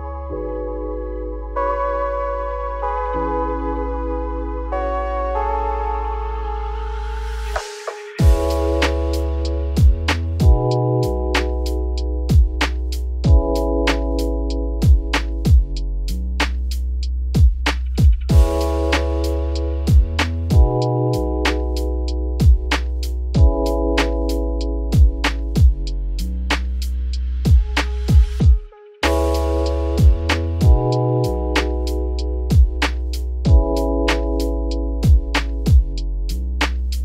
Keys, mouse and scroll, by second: 1.6 z, 2.1 middle click, 2.8 s, 5.4 scroll down 1, 5.5 middle click, 6.4 z, 6.7 middle click, 7.2 Tab, 8.8 alt+x, 11.1 click, 12.1-15.0 shift+drag, 15.0-16.9 right drag, 16.9 click, 17.7 click, 18.6-18.9 middle drag, 18.9 click, 19.2 scroll down 1, 19.3 middle drag, 19.5-19.9 scroll up 3, 19.9 click, 20.7 click, 22.9-25.9 shift+drag, 26.6-28.0 drag, 28.4 scroll down 1, 28.5-28.8 middle drag, 28.8 click, 29.1 `, 30.0 ctrl+s, 30.2-31.1 scroll down 9, 31.1 click, 31.9 click, 32.2 scroll up 5, 32.8-33.2 scroll down 5, 33.2-33.5 shift+middle drag, 33.5-34.8 scroll up 1, 34.8-35.1 shift+middle drag, 35.1-35.9 scroll up 3, 35.9 click, 36.2-36.5 scroll up 3, 36.6-37.0 shift+middle drag.